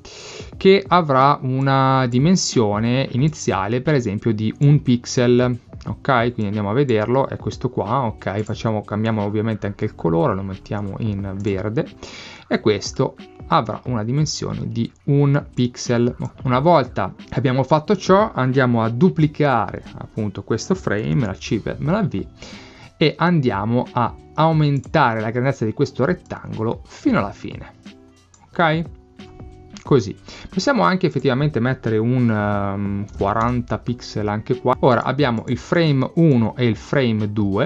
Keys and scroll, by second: 21.1 super+c, 21.5 super+v, 32.9-33.8 typing.